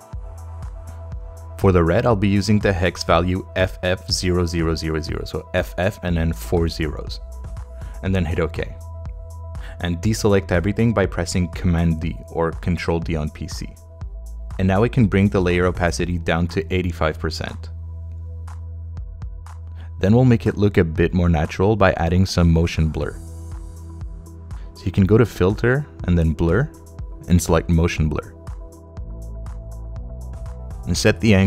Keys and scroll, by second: 2.7 f, 3.9 0, 6.4 Return, 8.5 Return, 11.4 super+d.